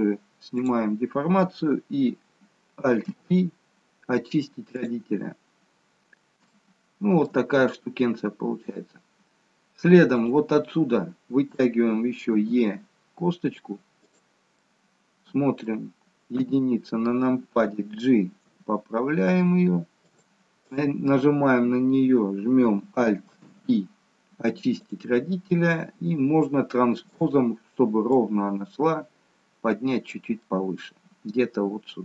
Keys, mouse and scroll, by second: 0.6 click, 3.0 alt+p, 5.4-6.0 scroll down 1, 6.0 scroll down 1, 6.5 shift+middle click, 10.0 click, 10.6-12.2 scroll down 1, 12.2 e, 14.7 middle click, 16.1 KP_1, 18.3 g, 20.6 click, 21.6-22.2 scroll up 1, 23.3 alt+p, 25.2-26.4 scroll down 2, 26.4-27.0 scroll down 1, 27.0 click, 28.1 click, 30.3 middle click.